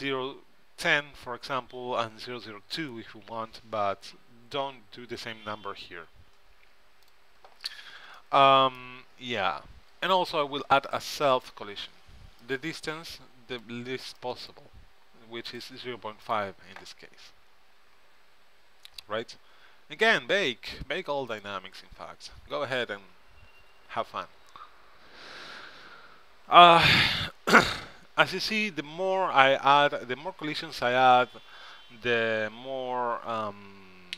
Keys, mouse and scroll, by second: 7.2-8.3 drag, 8.3 middle click, 10.1-11.5 middle drag, 11.5-16.2 drag, 19.0-21.1 middle drag, 21.5-34.1 drag.